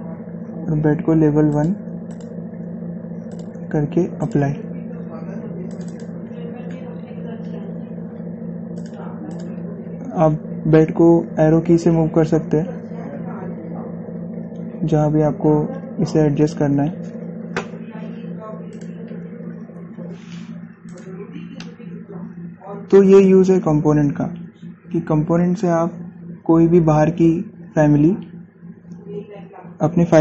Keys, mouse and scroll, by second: 7.6-8.6 scroll down 1, 8.6 scroll up 1, 9.5 click, 11.9 Down, 14.9 Left, 19.4 click, 19.5 click, 20.8 scroll down 1, 21.6 click, 22.2-24.5 shift+middle drag, 24.5 scroll down 1, 27.2 scroll up 1, 29.2-29.9 scroll down 1.